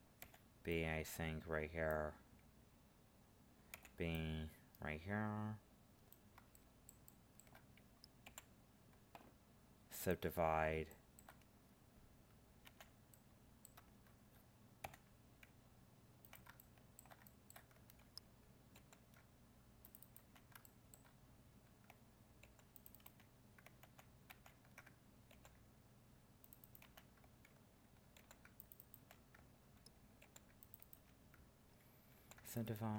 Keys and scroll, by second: 18.7 ctrl+r, 22.4 ctrl+r, 23.8 ctrl+z, 25.3 ctrl+r.